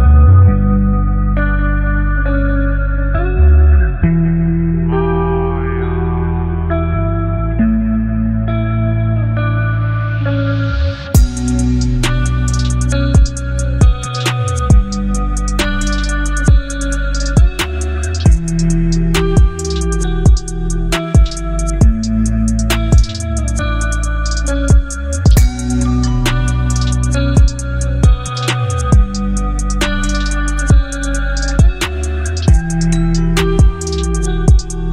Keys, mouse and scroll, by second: 0.1-0.7 alt+right drag, 1.4-3.3 drag, 17.3 shift+click, 18.9 ctrl+g, 20.1 ctrl+j, 21.5 ctrl+e.